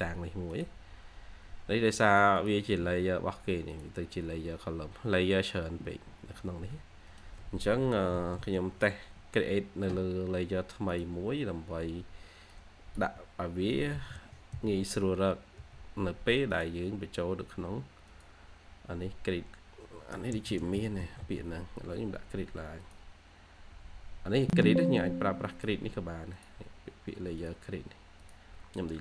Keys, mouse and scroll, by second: 0.0 scroll up 1, 0.2 x, 1.7 Escape, 2.3 double click, 6.4 Escape, 6.6 Escape, 7.0 middle click, 7.8 typing, 14.2-15.5 typing, 20.4-21.6 typing.